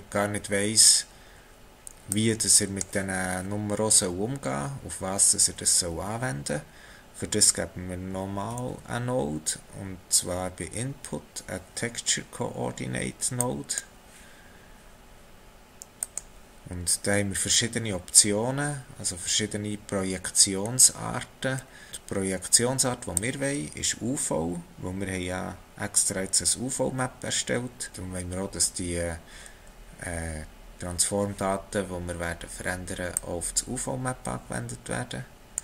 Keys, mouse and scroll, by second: 2.1 click, 8.6 shift+a, 21.0 scroll up 2, 21.7 scroll up 2, 23.2 click, 33.1 click.